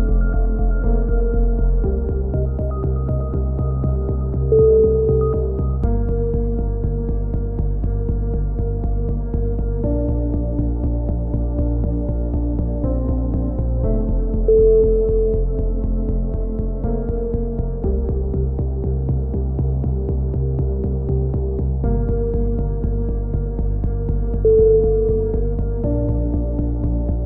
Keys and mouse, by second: 1.0 alt+shift+s, 1.5 a, 1.9 click, 2.8 right click, 3.3 click, 3.9 right click, 4.1 click, 4.6 right click, 5.3 alt+KP_3, 6.1 alt+shift+s, 6.6 a, 6.7-12.6 drag, 11.5-13.8 right drag, 13.5-14.5 drag, 14.5 right click, 14.6 click, 15.3 right click, 16.0-17.4 drag, 16.4-18.1 right drag, 18.1 KP_1, 18.4 z, 18.7 click, 19.1 ctrl+z, 19.7 KP_7, 19.9 z, 20.5 click, 21.5 KP_1, 21.6 z, 21.9 click, 23.0-24.7 drag, 24.0 a, 24.1 right click, 24.7 middle click, 24.7 KP_1, 25.8 a, 26.2 ctrl+z, 26.4 ctrl+z, 26.6 ctrl+z, 26.7 ctrl+z, 27.1 click.